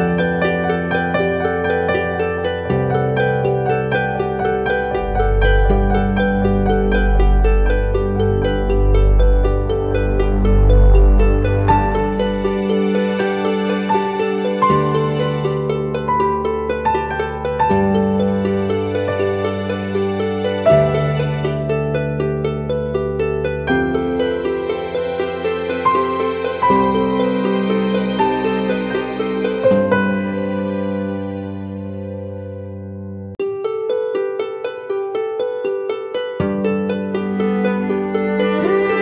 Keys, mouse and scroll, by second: 27.7 double click, 31.1 e.